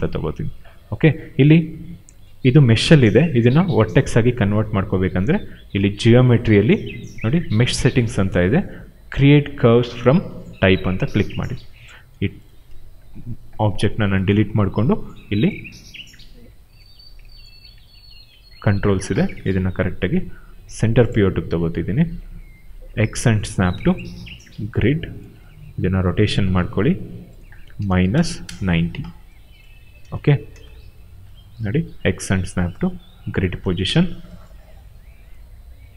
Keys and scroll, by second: 13.1 Delete, 16.1 r, 19.4 w, 23.1 x, 25.3 e, 26.5 ctrl+a, 27.4-28.6 typing, 29.9 space, 31.5 w, 32.2 x, 33.6 space, 34.9 r.